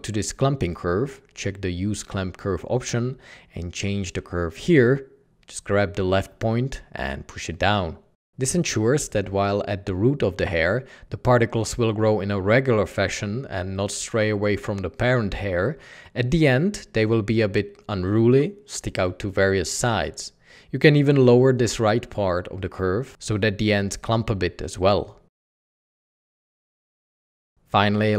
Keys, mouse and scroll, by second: 25.3 Escape, 25.4 Tab, 25.8 Tab, 27.4 ctrl+t.